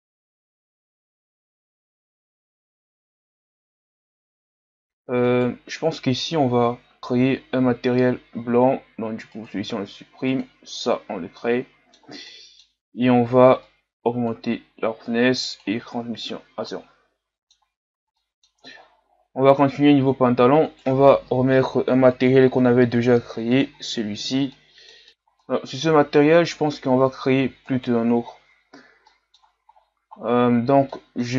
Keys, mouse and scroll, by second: 0.9 middle click, 1.5 scroll up 2, 1.7 middle click, 2.1 click, 2.8 middle click, 2.9 scroll up 1, 3.0 a, 3.1 scroll down 1, 3.1 middle click, 3.5 right click, 4.2 click, 4.4 a, 4.5 scroll down 1, 4.6 middle click, 4.8-5.3 scroll up 6, 5.3-7.0 right drag, 7.0-9.5 middle drag, 9.5-16.0 drag, 16.0 a, 16.4 scroll down 2, 16.7-18.7 middle drag, 18.7-19.4 scroll down 3, 19.4-20.1 scroll up 1, 20.1-20.7 scroll up 1, 20.7-23.7 right drag, 23.7 click, 24.5 middle click, 25.1 click, 25.4-27.7 middle drag, 27.7 right click, 28.7-29.1 scroll down 4, 29.1 middle click, 29.7-31.3 scroll down 1.